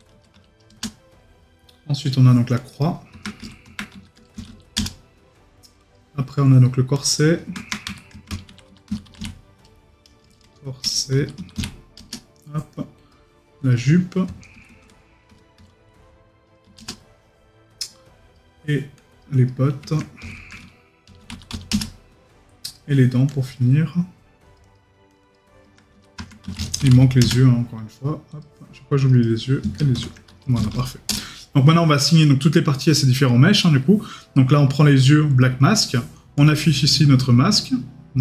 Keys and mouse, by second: 33.6 right click.